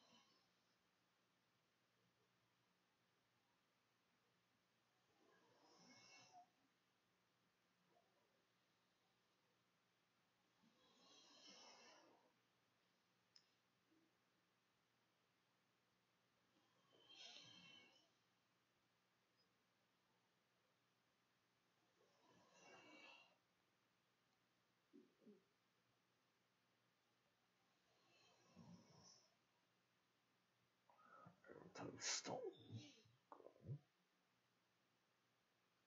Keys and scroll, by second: 0.0-4.2 typing, 5.5-6.4 typing, 10.6 ctrl+shift+z, 10.7 ctrl+shift+a, 11.1 ctrl+shift+s, 13.6 d.